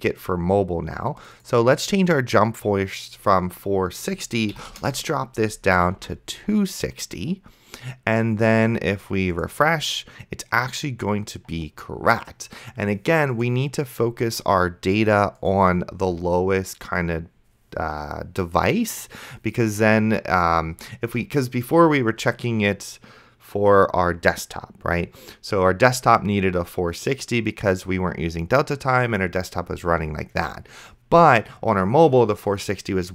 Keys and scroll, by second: 4.7 KP_6, 4.9 KP_0, 6.3 ctrl+s.